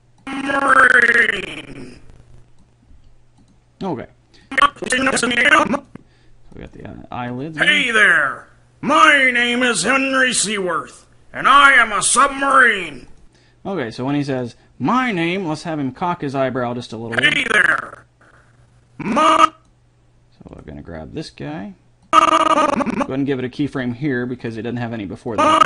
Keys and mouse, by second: 3.1 g, 13.3-14.5 drag, 14.6-16.7 middle drag, 17.3-18.3 drag, 20.7-22.6 middle drag, 23.9 g.